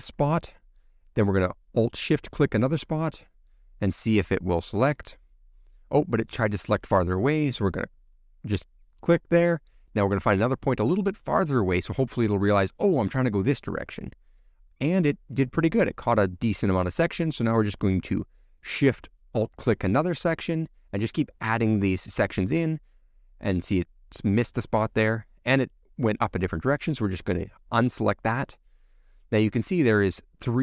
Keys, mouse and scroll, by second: 5.2 alt+click, 12.1 alt+shift+click, 13.2-19.8 middle drag, 19.8 alt+shift+click, 22.0 alt+shift+click, 23.7 alt+shift+click, 26.2 shift+click, 27.6 shift+click, 28.8-30.6 middle drag.